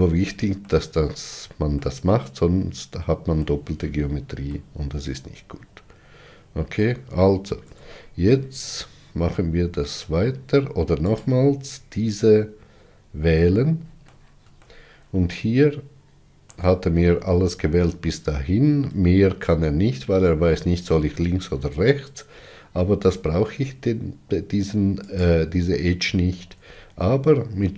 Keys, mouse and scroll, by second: 0.6-7.5 shift+middle drag, 7.6 2, 8.2-11.0 middle drag, 11.0 alt+click, 12.9 scroll down 2, 13.3-17.6 middle drag, 25.0 shift+click.